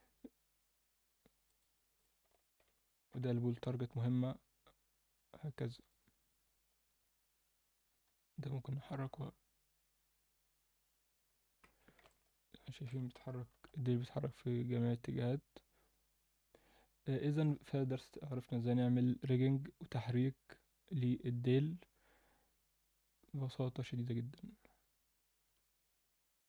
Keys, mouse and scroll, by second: 2.0 click, 2.3 alt+middle click, 3.1 g, 6.2 click, 6.5 alt+middle click, 8.0 KP_7, 8.8 g, 12.0-12.9 alt+middle drag, 13.5 g.